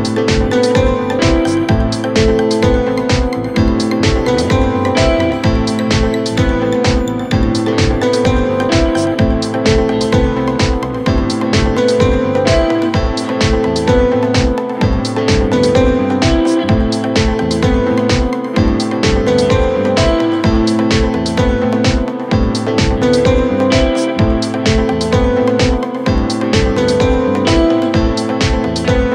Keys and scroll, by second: 11.3 4, 25.5 2, 27.7 ].